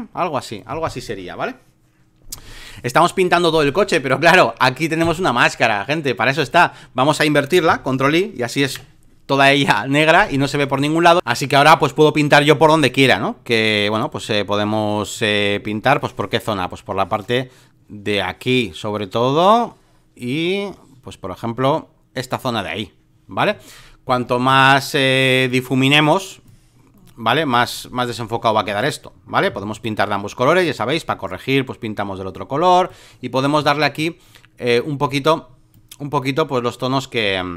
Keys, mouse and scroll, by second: 5.0-7.8 drag, 8.6 ctrl+i, 10.7 click, 13.9-15.1 right drag, 15.1-24.4 drag, 24.4-25.4 right drag, 25.4-28.5 drag, 28.6 ctrl+z, 29.4 x, 29.7 right click, 30.6-33.5 drag, 33.5 x, 33.9-35.0 drag, 35.0 ctrl+z, 35.7-37.5 drag.